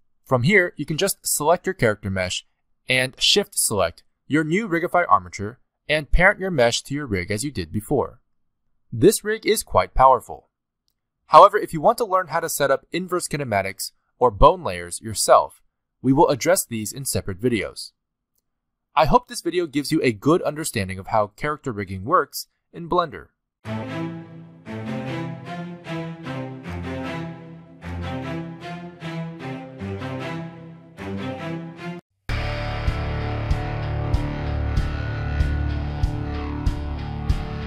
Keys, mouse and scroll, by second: 0.2 click, 1.2 scroll up 1, 1.8 click, 2.3 scroll up 2, 3.2 shift+click, 4.2-4.8 scroll down 3, 5.2 ctrl+p, 7.6 click, 8.4 ctrl+Tab, 8.6 click, 8.9 middle click, 9.3 g, 10.2 middle click, 10.3 scroll up 1, 10.4 ctrl+Tab, 10.5 click, 10.7 shift+click, 11.0 ctrl+p, 11.4 click, 11.6 ctrl+Tab, 11.7 middle click, 11.8-17.2 typing, 12.5 click, 13.0 click, 13.5 click, 13.6 click, 14.1 click, 14.9 click, 15.5 click, 16.1 click, 17.0 scroll down 1, 17.9 click, 17.9 scroll up 2, 18.3 middle click, 18.6 click, 18.7-20.2 typing, 19.0 click, 20.4 scroll down 3, 20.4 shift+middle click, 20.6 scroll up 1, 20.7 shift+middle click, 20.8 click, 20.9 alt+r, 21.1 click, 21.2 alt+r, 21.8 r, 22.0 r, 22.3 middle click, 22.5 shift+middle click, 22.6 middle click.